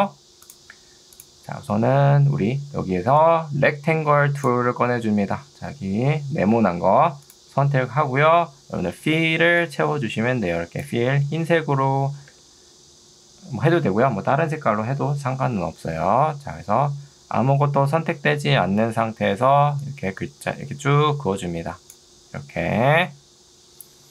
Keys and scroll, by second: 2.8 ctrl+2, 6.6 Escape, 9.2 ctrl+2, 12.4 Escape.